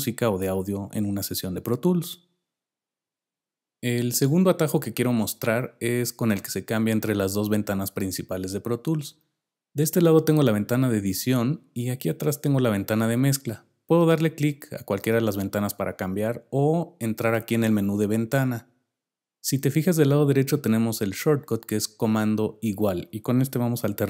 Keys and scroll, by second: 23.8 super+=.